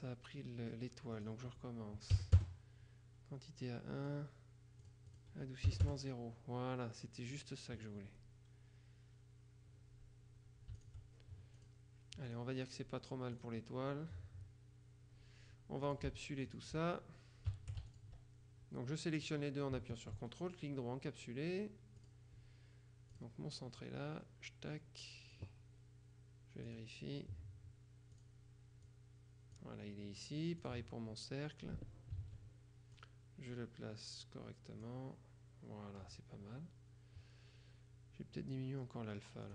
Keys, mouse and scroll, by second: 1.3 click, 2.3 KP_1, 2.5 KP_Enter, 4.0-4.5 scroll down 2, 4.9 click, 5.8 KP_0, 6.0 KP_Enter, 7.4 click, 10.9 shift+click, 11.7 click, 13.5 click, 15.9 shift+click, 19.3 click, 20.1 ctrl+click, 20.3 ctrl+right click, 22.1 click, 23.2 click, 23.9-25.9 drag, 26.7 click, 28.3 click, 29.0 click, 30.7 click, 32.3 ctrl+a, 33.1-35.5 drag.